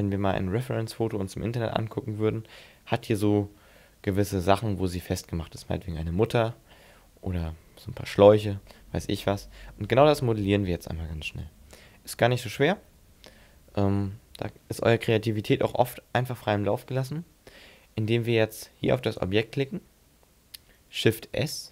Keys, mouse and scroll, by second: 0.7-1.1 scroll down 4, 1.2 scroll up 6, 2.2-2.8 scroll up 5, 17.7-18.2 scroll down 4, 18.2-19.1 scroll up 3, 19.1 right click, 21.3 shift+s.